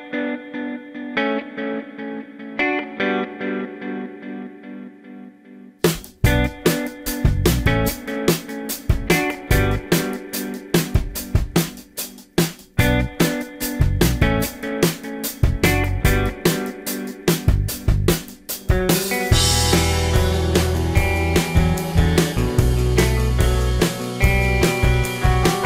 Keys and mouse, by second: 5.5-11.0 drag, 5.5 s, 11.0-12.4 middle drag, 12.4-12.7 drag, 12.7 middle click, 12.8-13.6 drag, 13.6-16.2 middle drag, 16.8-18.3 middle drag, 19.0 KP_3, 23.7 middle drag.